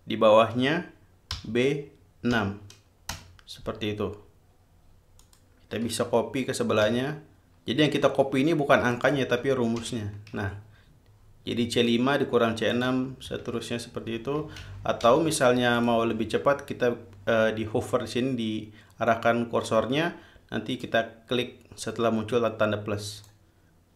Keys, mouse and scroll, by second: 1.6 b, 2.6 6, 3.4 Return, 5.5 click, 7.1 ctrl+c, 9.2 ctrl+click, 10.1 ctrl+v, 13.0 ctrl+click, 13.6 ctrl+v, 14.9 ctrl+z, 16.0 ctrl+click, 21.1-23.7 drag.